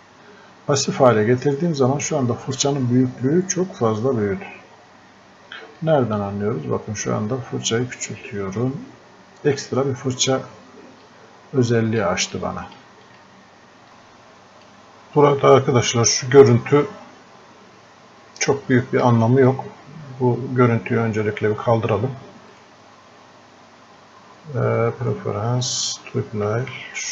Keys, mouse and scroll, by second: 5.8 right click, 7.1-22.6 drag, 25.6 click.